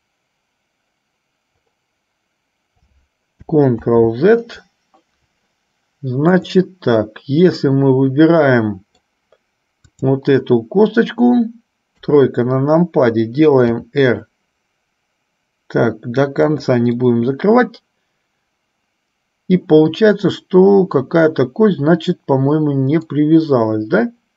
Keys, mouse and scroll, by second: 4.0 ctrl+z, 6.5 click, 7.9-9.4 middle drag, 10.1 click, 12.1 KP_3, 13.9 r, 17.4-23.4 middle drag.